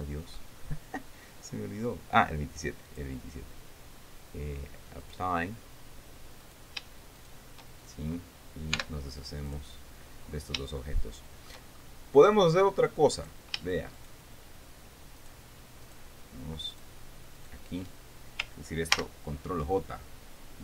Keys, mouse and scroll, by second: 0.9-1.2 scroll down 2, 1.8-2.1 scroll down 2, 2.3 scroll up 2, 2.5 middle click, 3.4 click, 5.6 click, 7.0 right click, 7.7 shift+right click, 9.3 x, 10.0 click, 10.8-11.1 scroll down 1, 11.3 shift+middle click, 12.3-12.6 shift+scroll up 1, 13.7 right click, 14.5 shift+right click, 15.8 shift+right click, 16.4 shift+right click, 17.3 shift+right click, 18.0 shift+right click, 19.5 ctrl+j.